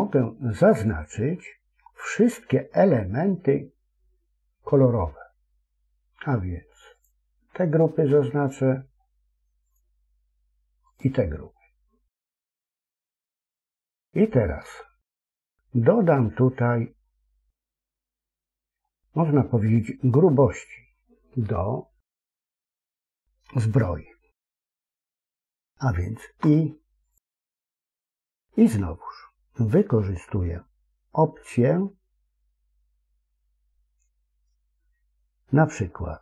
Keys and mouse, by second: 6.9 click, 9.5 click, 10.8 click, 12.3 middle click, 13.7 middle click, 14.6 shift+middle click, 18.7 middle click, 26.1 i.